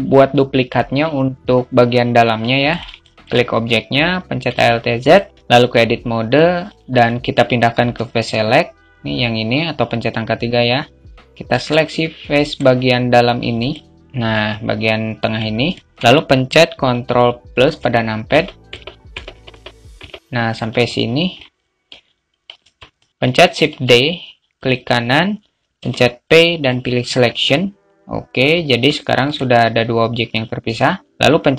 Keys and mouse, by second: 2.1 click, 2.4 alt+shift+middle drag, 4.5 alt+z, 4.5-5.3 alt+middle drag, 5.3 Tab, 10.9 click, 11.7 click, 13.0-14.0 drag, 15.1 alt+shift+middle click, 17.7 ctrl+KP_Add, 18.0 ctrl+KP_Add, 18.5 ctrl+KP_Add, 18.7 ctrl+KP_Add, 18.8 ctrl+KP_Add, 19.4 ctrl+KP_Add, 19.8 ctrl+KP_Add, 20.3 alt+middle click, 22.7 alt+shift+middle click, 23.5 shift+d, 28.3 Tab, 28.6 click.